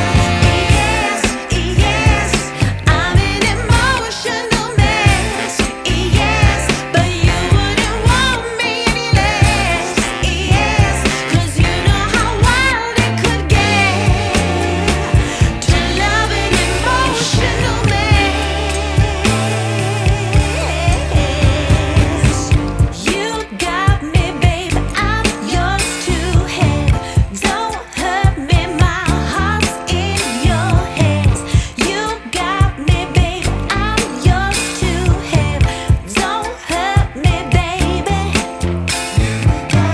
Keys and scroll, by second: 29.5 ctrl+super+Tab, 30.2 ctrl+Tab.